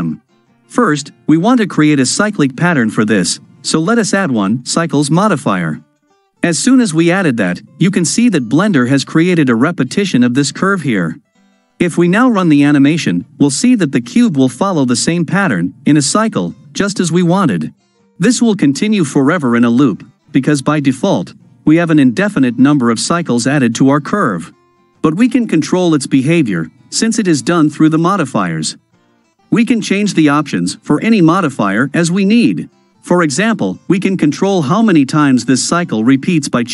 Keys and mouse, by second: 3.4-5.1 drag, 11.7 space, 28.5 space.